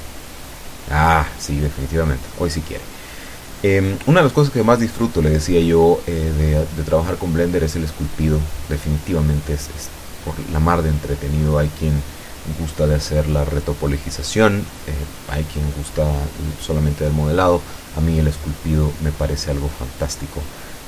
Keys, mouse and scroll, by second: 0.9 middle click, 1.6 scroll up 2, 3.8-6.0 middle drag, 7.3 ctrl+click, 8.2-8.7 ctrl+scroll down 2, 8.7 scroll down 1, 9.0 middle click, 13.8 click, 14.3 click, 15.3 click, 17.2 click, 18.9 click, 19.8 click.